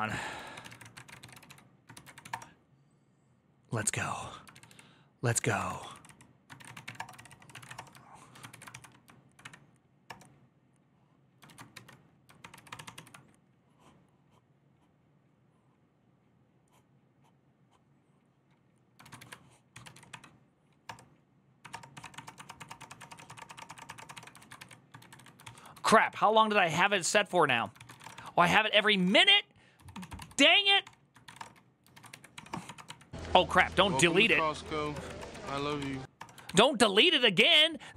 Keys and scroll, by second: 18.8 ctrl+a, 19.0-20.2 typing, 20.6 Return, 21.4 Up, 21.5 Return, 21.7 Up, 21.8 Return, 21.9 Up, 22.0 Return, 22.2 Return, 22.3 Up, 22.4 Return, 22.6 Up, 22.6 Return, 22.7 Up, 22.8 Return, 23.0 Up, 23.0 Return, 23.1 Up, 23.2 Return, 23.4 Up, 23.4 Return, 23.5 Up, 23.6 Return, 23.8 Up, 23.8 Return, 23.8-28.7 typing, 23.9 Up, 24.2 ctrl+a, 27.2 ctrl+u, 28.7 Return, 28.8 Return, 28.9 ctrl+d, 29.1 ctrl+d, 30.1-31.1 typing, 31.2 Return, 31.7 ctrl+a, 31.9 ctrl+a, 32.1 Up, 32.3 Return, 32.4-33.1 typing, 33.2 ctrl+c, 33.5 Up, 33.7 Up, 34.1 Return, 34.3 Up, 34.7 Return, 34.9 Up, 35.0 Return, 35.0-35.8 typing, 35.9 Return, 36.3 alt++.